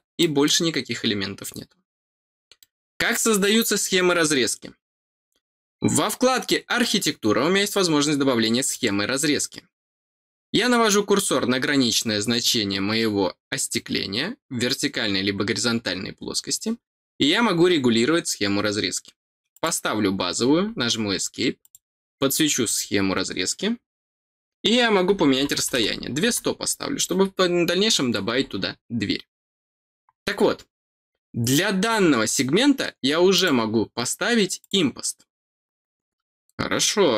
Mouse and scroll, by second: 0.1 middle click, 2.1 scroll down 1, 2.5 middle click, 8.6 click, 19.5 click, 21.6 click, 22.6 click, 33.3 click, 34.6 click.